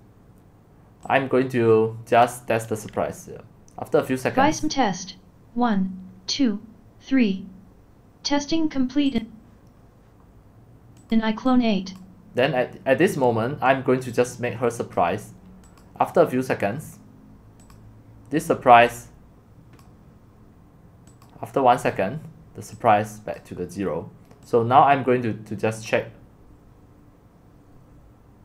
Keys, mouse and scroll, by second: 12.0 click, 15.0 click, 15.8 click, 17.7 click, 21.9-28.4 drag.